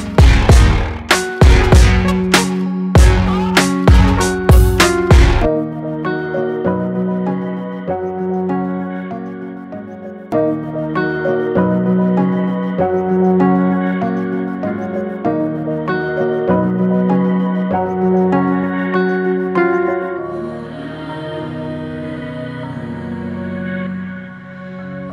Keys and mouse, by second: 17.7-21.6 drag.